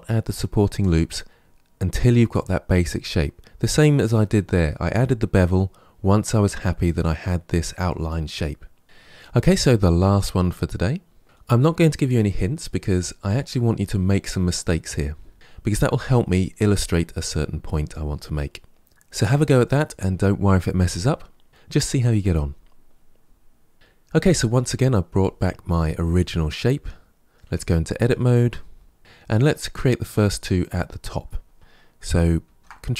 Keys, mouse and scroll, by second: 8.8 KP_Decimal, 9.1-12.1 middle drag, 13.2-16.2 middle drag, 23.7-26.6 scroll down 1, 26.7-27.4 middle drag, 27.4 Tab, 27.9 shift+middle click, 28.6-29.0 scroll up 2, 32.3 ctrl+r.